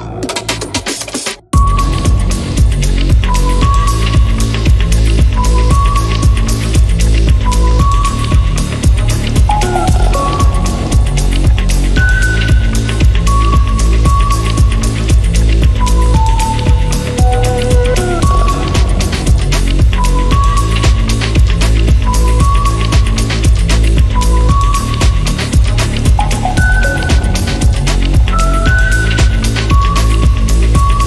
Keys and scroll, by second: 1.3 0, 1.6 Return, 8.6 Escape, 17.4 Escape.